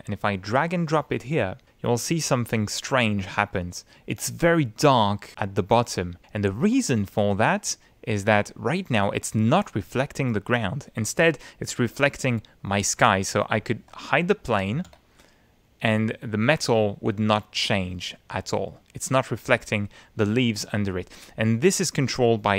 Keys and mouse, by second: 2.3-3.7 middle drag, 6.2-9.0 middle drag, 13.0 click, 14.3 Tab, 14.7 ctrl+z, 15.1 ctrl+click, 16.7 click, 16.8 middle click, 17.2 middle click, 17.3 click, 18.7 click, 21.5 click.